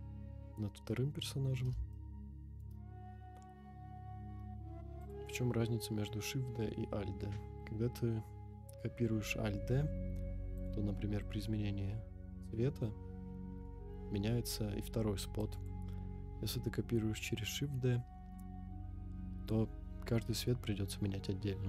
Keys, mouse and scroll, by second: 1.2 scroll down 1, 1.9-2.6 shift+middle drag, 5.0 click, 10.5 click.